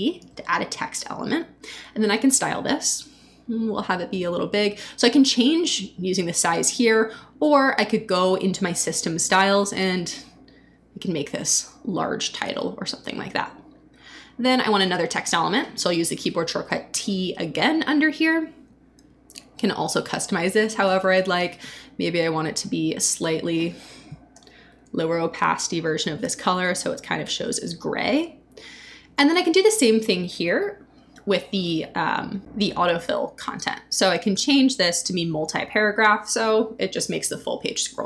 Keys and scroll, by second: 0.2 t, 16.6 t, 24.6 shift+Down.